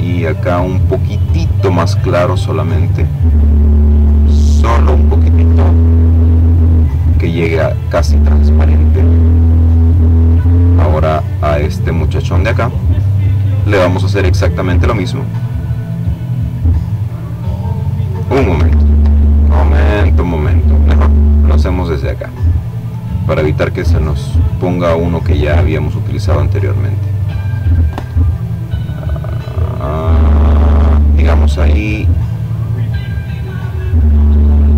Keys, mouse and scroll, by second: 1.1-3.6 drag, 4.5-5.6 drag, 7.6-8.7 drag, 9.4 click, 11.7 click, 13.6-16.8 drag, 16.8 ctrl+z, 19.8 click, 20.9 click, 22.6-24.2 drag, 24.2-26.8 drag, 27.2-29.7 drag, 30.1-32.8 drag.